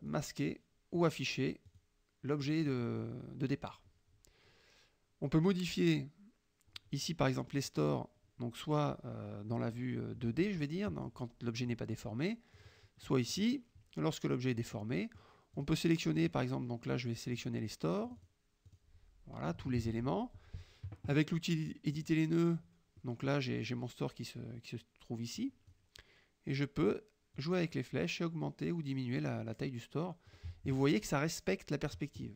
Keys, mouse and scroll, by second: 0.1 click, 1.1 click, 1.8 click, 7.8 click, 10.7 click, 12.6 click, 13.1 middle click, 14.8 middle click, 15.6 click, 16.2 click, 17.3 click, 18.1 click, 18.8 click, 19.9 ctrl+a, 22.0 click, 23.0 middle click, 25.5 click, 27.4-30.6 drag.